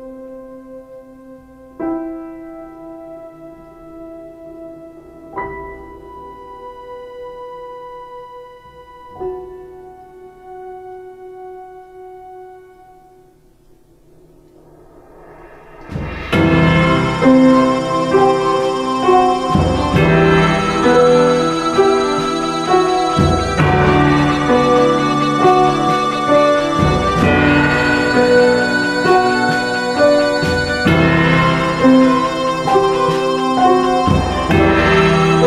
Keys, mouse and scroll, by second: 26.8 ctrl+t.